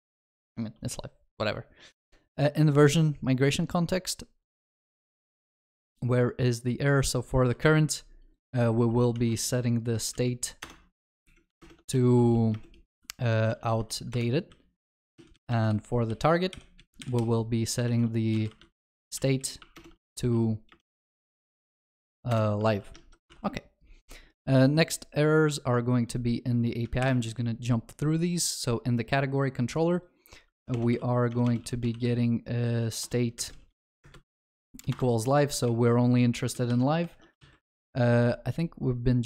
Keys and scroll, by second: 10.7 Return, 14.1 Return, 18.8 ctrl+w, 22.7 ctrl+s, 23.0 ctrl+alt+shift+l, 23.4 ctrl+s, 27.0 alt+shift+F2, 33.1 Return, 36.3 ctrl+shift+Left, 36.4 ctrl+shift+Right.